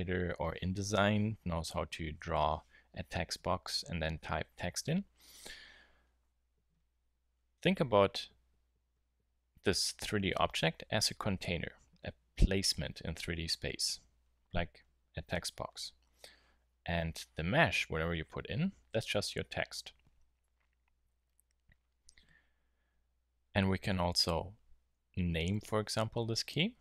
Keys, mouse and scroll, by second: 16.3 Tab, 20.4 Tab, 25.2 t.